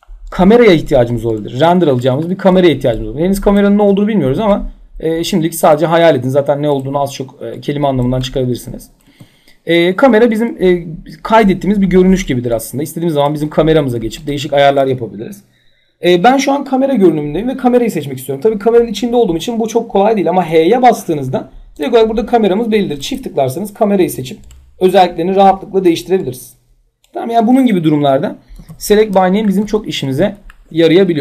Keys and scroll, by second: 3.5 w, 8.9 c, 20.0 h, 28.1 p.